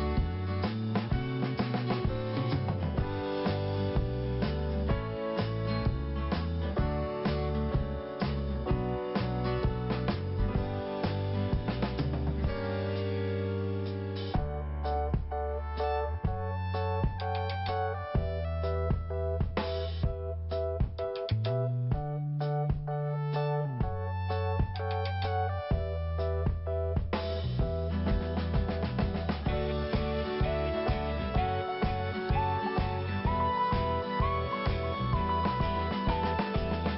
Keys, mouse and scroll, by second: 0.9 click, 1.0 click, 1.9 click, 4.7 click, 5.7 click, 5.8 click, 6.7 click, 9.7 click, 14.9 click, 18.1 click, 19.0 click, 23.2 scroll down 1, 23.9 scroll up 1, 25.5 click, 27.8 scroll down 1, 28.6 right click, 29.4 click, 29.9 right click, 30.4 click, 32.3 click, 32.4 click, 33.0 click, 33.1 click, 34.0 click, 36.7 scroll up 1.